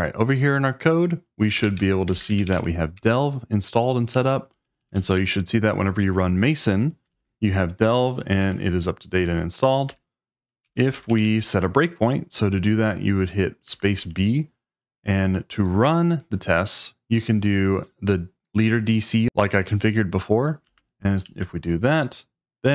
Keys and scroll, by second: 1.4-4.9 typing, 7.1 shift+v, 8.4 Escape, 9.9-11.2 typing, 13.2-14.0 typing, 20.7 space, 21.2 d, 21.8 c.